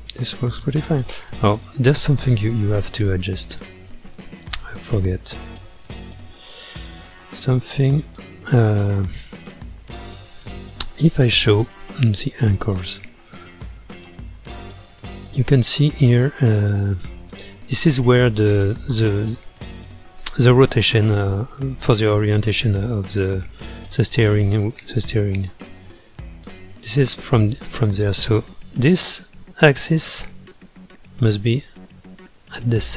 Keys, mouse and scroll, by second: 0.7 space, 1.6-3.7 drag, 6.0 click, 6.9-7.7 middle drag, 7.7-9.3 scroll up 10, 9.5 middle click, 10.3-10.9 scroll up 1, 11.9 click, 13.5 click, 14.5 click, 15.1-21.2 middle drag, 21.6 scroll down 2, 22.5-25.5 middle drag, 26.4 scroll down 1, 27.5-30.4 middle drag, 30.4 click, 31.1 scroll up 2, 32.2-32.8 scroll up 2, 32.8-32.9 middle drag.